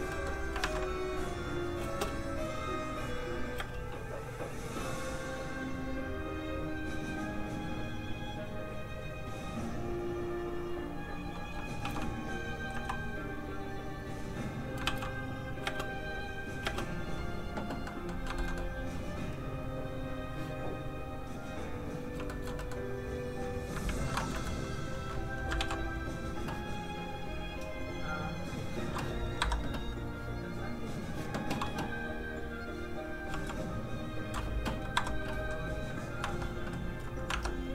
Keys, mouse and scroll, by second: 0.1 middle click, 0.6 alt+a, 1.4 click, 1.8 space, 4.1 click, 11.6 shift+d, 12.4 d, 12.5 click, 12.7 x, 13.1 click, 14.8 shift+d, 15.3 click, 15.4 click, 15.6 space, 17.8 middle click, 18.1 scroll down 1, 18.2 shift+middle click, 19.6 shift+click, 19.7 click, 22.2 shift+middle click, 22.5 middle click, 22.6 middle click, 23.8 ctrl+Tab, 24.3 shift+middle click, 25.5 ctrl+d, 25.9 click, 26.0 click, 29.4 Escape, 30.0 click, 32.0-33.0 scroll down 1, 33.3 f, 33.4 click, 34.8 click, 34.9 Escape, 37.3 alt+Tab.